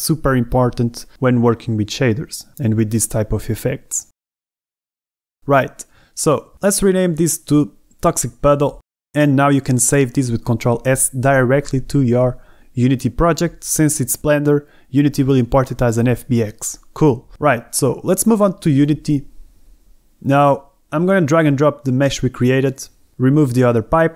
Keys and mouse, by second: 0.2 z, 2.1 g, 2.2 g, 2.8 click, 5.6 Tab, 8.5 d, 8.9 BackSpace, 10.0-11.3 middle drag, 11.9 middle click, 12.7 ctrl+s.